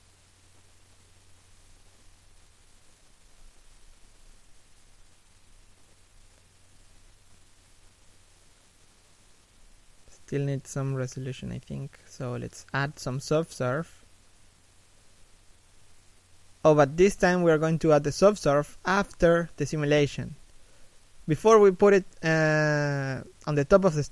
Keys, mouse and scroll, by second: 1.3 middle click, 2.7 Caps_Lock, 2.8 middle click, 3.5 Caps_Lock, 5.3 scroll up 1, 5.8 middle click, 9.8 scroll down 1, 10.0 middle click.